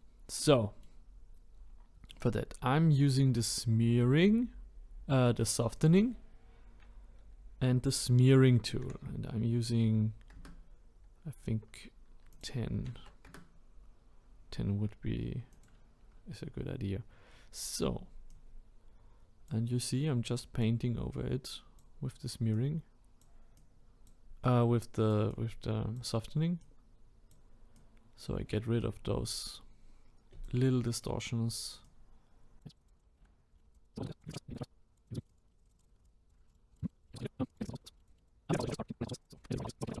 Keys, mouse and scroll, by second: 0.1-0.5 scroll down 1, 0.5-2.2 middle drag, 2.2-10.4 drag, 13.3-15.6 drag, 16.0-18.1 scroll up 7, 18.3-33.0 drag, 33.0 middle click, 33.1 scroll down 4, 33.1 middle click, 33.2 scroll up 1, 33.4 click, 33.5-34.0 scroll down 2, 33.7 click, 34.0 scroll up 1, 34.3-34.8 drag, 34.9-35.4 drag, 35.4 middle click, 35.6 click, 35.9 middle drag, 36.0-36.7 drag, 36.7 middle click, 36.9 click, 37.0 scroll down 3, 37.1 scroll up 1, 37.3 middle click, 37.4 scroll down 3, 37.5 click, 37.7 middle click, 38.0 drag, 38.1 scroll down 1, 38.2 click, 38.4-39.9 drag, 39.9-40.0 shift+middle drag.